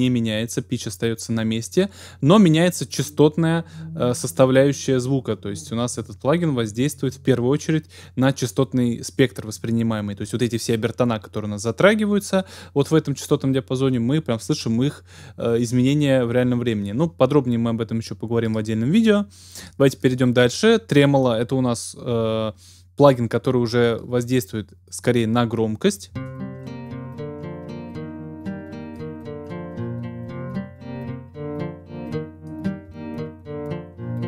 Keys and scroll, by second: 26.1 space.